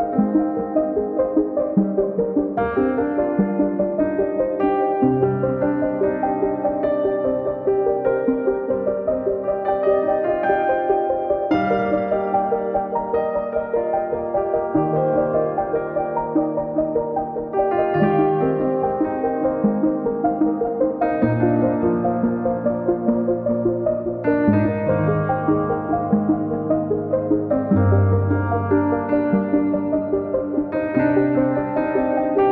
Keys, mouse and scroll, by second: 2.3 click, 3.6-6.1 drag, 6.6 scroll down 2, 6.6-7.2 scroll up 4, 7.2-12.0 drag, 12.0 scroll down 6, 12.2-14.3 drag, 14.7 middle click, 14.9 scroll up 4, 15.1 middle click, 16.0 click, 16.5 middle click, 16.7 scroll up 2, 16.9 click, 17.4 middle click, 17.5 click, 17.9 middle click, 18.5 click, 18.7 scroll down 3, 18.9 KP_1, 19.2 scroll up 2, 19.8 click, 20.2 scroll down 3, 20.4 click, 20.6-21.2 scroll up 6, 20.9 click, 21.2-21.5 scroll down 5, 21.5-22.2 scroll up 2, 21.8 KP_0, 22.3 KP_0, 23.3 click, 23.5 scroll down 4, 23.7 scroll up 2, 25.4 middle drag, 25.6 scroll up 2, 26.0 click, 26.3 KP_0, 26.4 scroll up 1, 26.7 scroll down 3, 26.9 scroll up 6, 30.6 click, 32.2 click.